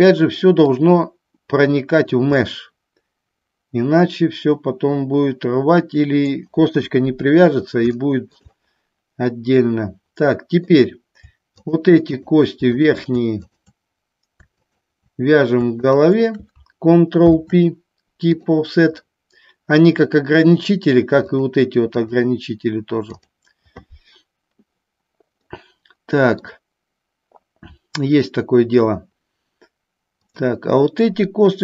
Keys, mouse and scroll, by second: 0.9-2.3 drag, 2.4-6.5 middle drag, 6.9 KP_1, 8.2 shift+middle click, 8.7-10.8 middle drag, 12.2 shift+click, 12.9 shift+click, 16.0 shift+click, 17.3 ctrl+p, 19.1-20.3 middle drag, 22.0 click, 25.7 middle click, 30.4 click.